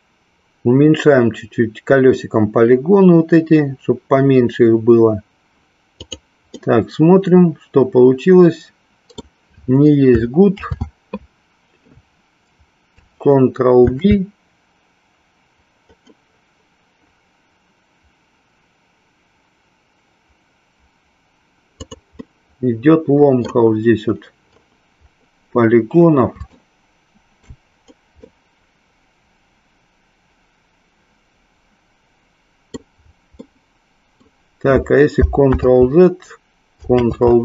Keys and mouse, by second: 6.0 click, 6.6-9.2 middle drag, 13.7 ctrl+b, 22.2-23.5 middle drag, 26.5-27.6 shift+middle drag, 28.2-32.7 middle drag, 33.4 middle click.